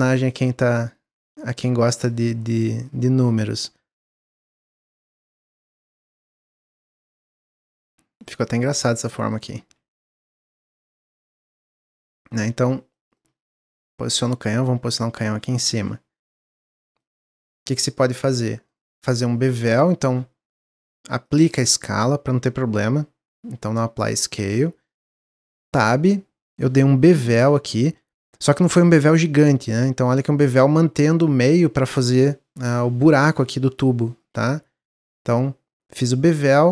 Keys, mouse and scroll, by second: 0.1 click, 0.8 middle click, 1.4 click, 1.8 middle click, 2.8-3.9 drag, 3.9-5.0 middle drag, 5.0 click, 5.4 middle click, 5.7 scroll up 2, 6.0 middle click, 6.3-6.7 scroll down 1, 6.7 s, 8.4 click, 10.3-11.5 middle drag, 11.5 click, 12.9-14.1 middle drag, 14.1 click, 15.2 middle drag, 16.7 middle click, 17.0 scroll up 1, 17.3-18.7 shift+middle drag, 18.7 scroll up 1, 18.9-21.2 middle drag, 21.2-24.2 drag, 25.7 click, 36.2 click.